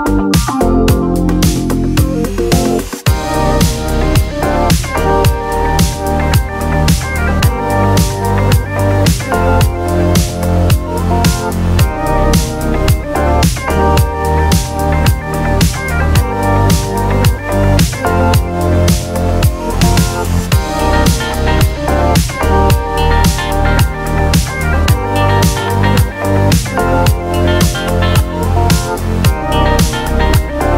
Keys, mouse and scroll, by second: 0.1 scroll down 1, 0.4 click, 0.9 ctrl+a, 4.0-4.6 drag, 5.9 click, 6.1 e, 7.4 click, 7.7 e, 8.9 click, 9.2 e, 10.9 click, 11.2 e, 14.2 click, 14.9 click, 15.7 click, 16.1-16.5 drag, 16.5 scroll down 1, 17.2 click, 18.2-18.6 scroll up 1, 18.6 click, 20.8-22.1 drag, 23.1-24.3 drag, 24.8 click, 26.3 click, 28.1 click, 28.6 scroll down 2, 28.8 click, 29.6 click.